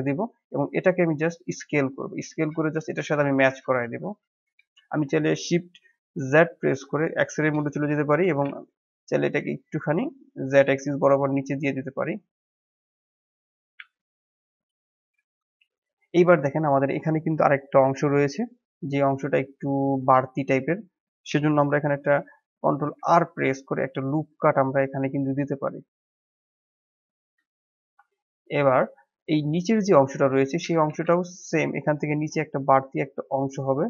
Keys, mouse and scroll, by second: 0.4 s, 6.3 shift+z, 8.2 g, 13.7 s, 14.9-15.2 scroll up 1, 15.2-18.4 shift+middle drag, 22.9 ctrl+r, 27.6 scroll down 2, 27.8 shift+middle click, 28.2-28.5 scroll up 1, 28.5 shift+middle click, 29.3 click, 30.0 click, 30.8 g.